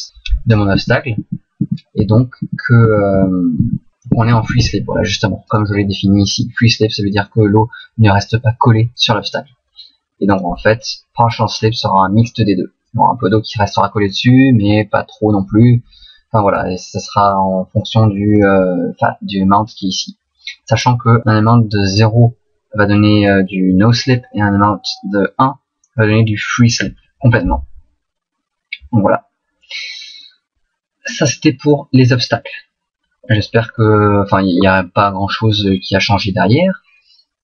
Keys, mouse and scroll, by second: 0.1 Right, 0.7 Right, 1.2 Right, 1.6 Right, 2.0 Right, 2.5 Right, 2.9 Right, 3.1 Right, 3.6 Right, 4.1 Right, 4.3 Right, 4.5 Right, 5.5 right click, 7.3 middle click, 9.0 middle click, 10.3 click, 14.1 middle click, 17.8 click, 30.2 middle click.